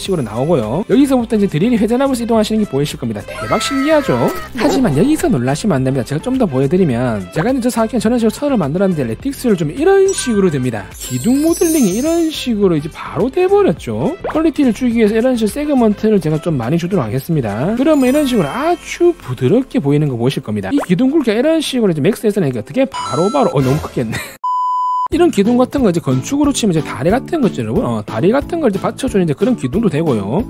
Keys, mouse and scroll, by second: 5.5 ctrl+a, 6.6 click, 9.8 click, 11.3 click, 12.2 middle click, 12.6 click, 13.3 middle click, 14.1 click, 15.6 click, 17.5 click, 22.3-24.3 drag, 26.1-26.4 scroll up 2, 26.7 click, 27.0-30.4 alt+middle drag.